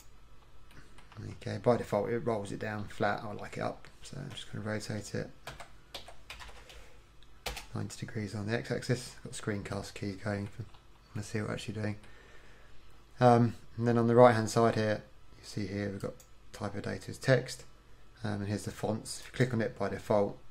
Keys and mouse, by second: 1.2 KP_1, 5.5 r, 9.8-16.0 middle drag, 16.0-20.5 drag.